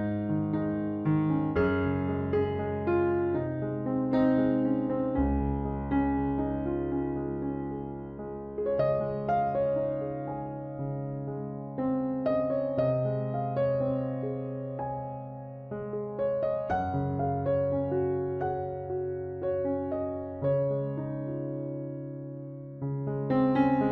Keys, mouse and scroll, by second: 0.1 e, 1.0 z, 2.4-4.0 drag, 3.5 KP_3, 3.8 KP_Decimal, 4.6 x, 11.1 z, 11.6 Tab, 11.9 z, 12.5-14.3 drag, 13.8 Tab, 14.5 ctrl+z, 15.1 ctrl+z, 15.6 x, 17.5 Tab, 19.5 KP_3, 19.5 KP_6, 21.7 s.